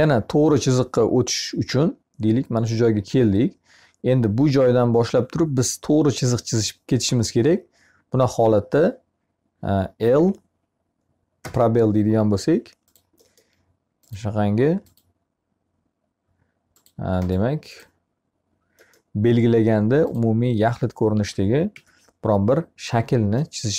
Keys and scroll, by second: 9.6 l, 21.1 Escape.